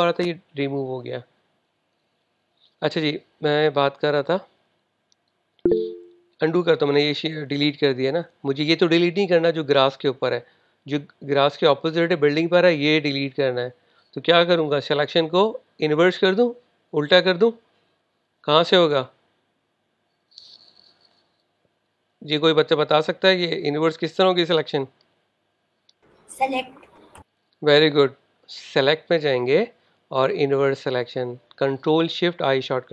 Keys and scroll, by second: 1.2 super+Tab, 8.3 super+z.